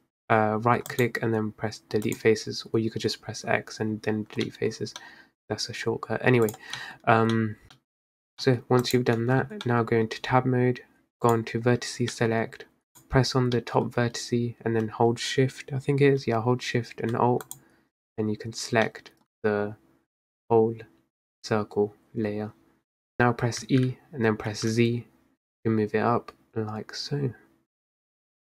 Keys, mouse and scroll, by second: 4.5 middle click, 4.8 scroll down 4, 5.1 middle click, 5.5-6.2 scroll up 3, 6.5 click, 6.8 middle click, 7.1-7.4 scroll up 2, 7.4 middle click, 7.7 click, 7.8 middle click, 8.1-8.5 scroll down 2, 8.5 middle click, 8.7 scroll up 2, 8.9 click, 9.3 Tab, 9.7-11.4 middle drag, 11.4-12.2 drag, 12.2 middle click, 12.5-13.0 scroll up 1, 13.0 click, 13.7-16.8 middle drag, 17.5 alt+shift+click, 18.9-22.0 middle drag, 23.2-23.5 scroll down 3, 23.7 e.